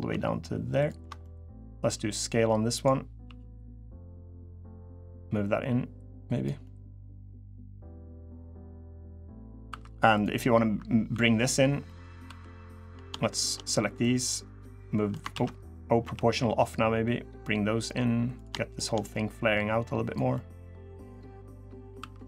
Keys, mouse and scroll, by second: 0.5 ctrl+click, 1.0 middle click, 1.7 s, 3.0 s, 4.9 click, 6.4 middle click, 7.8 middle click, 9.0 middle click, 9.4 2, 9.9 click, 10.8 3, 11.3 scroll down 1, 11.6 middle click, 12.0 2, 12.5 click, 13.1 shift+click, 13.8 click, 15.1 ctrl+z, 15.8 o, 16.4 click, 18.1 click, 18.5 shift+click, 18.7 shift+click, 19.1 click, 20.1 middle click, 21.7 3, 22.1 scroll down 2.